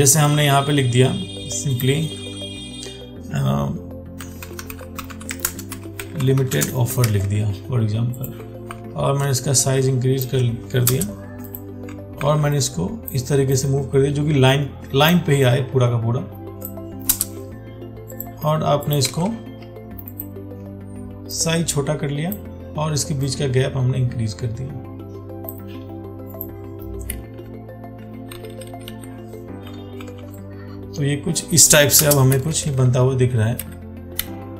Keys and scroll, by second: 7.4 ctrl+a, 12.5 ctrl+t, 19.4 ctrl+a, 30.2 ctrl+t.